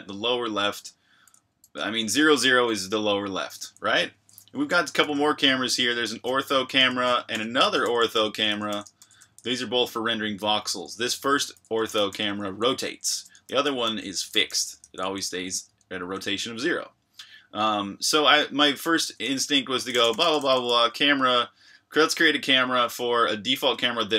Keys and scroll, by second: 1.8 Escape, 3.5-17.1 typing, 6.4 Escape, 18.3-20.7 typing, 22.9 Escape, 22.9 typing.